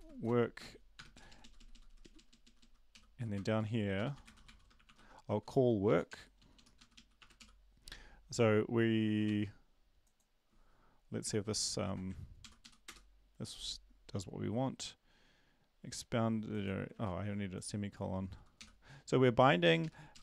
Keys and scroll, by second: 0.0-0.7 typing, 1.1 Down, 1.3 Down, 1.4 Down, 2.4 Down, 2.7-5.3 typing, 6.4 Down, 6.4 Up, 6.4-7.4 typing, 6.5 Down, 6.8 Up, 6.9 Up, 9.3 ctrl+s, 11.4 ctrl+`, 12.4 ctrl+l, 12.6 Up, 12.8 Return, 16.9 ctrl+`, 20.1 Up, 20.1 Down.